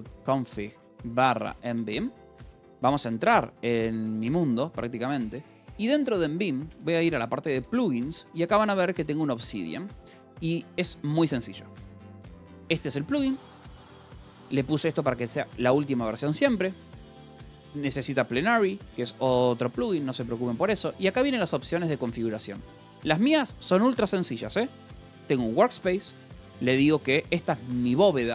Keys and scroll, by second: 0.0-4.3 typing, 6.0 :, 6.6 Return, 6.9 j, 7.5 Return, 8.1 j, 9.2 k, 9.5 Return, 10.3 g, 11.8 j, 12.6 shift+v, 14.0 Escape, 14.2 j, 15.0 shift+v, 16.7 Escape, 16.9 j, 18.1 Escape, 20.0 j, 20.6 k, 21.5 shift+v, 21.8 Escape, 22.6 j, 25.2 j, 26.1 Escape, 26.2 k, 27.0 j, 27.8 shift+v.